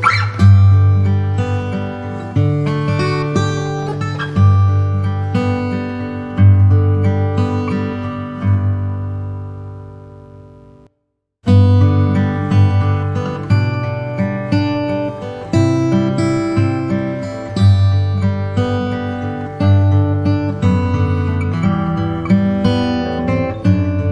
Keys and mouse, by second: 2.9 e, 6.7 s, 11.0 e, 17.7 e, 22.7 s.